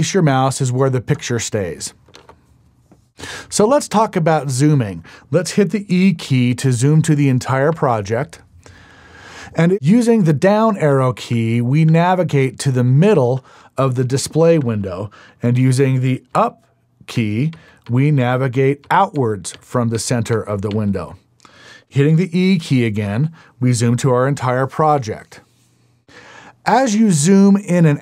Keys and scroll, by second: 7.8 e, 10.7 Down, 12.1 Down, 12.5 Down, 14.8 Down, 16.5 Up, 20.5 Up.